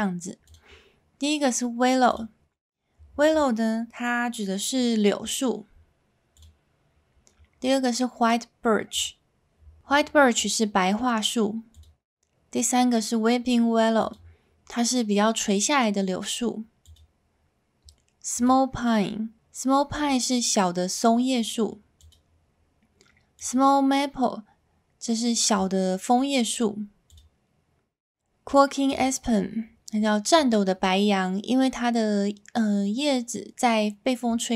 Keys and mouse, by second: 0.6-2.3 drag, 6.5-9.1 drag, 11.8-14.2 drag, 16.8-18.5 drag, 22.0-23.5 drag, 27.1-29.0 drag.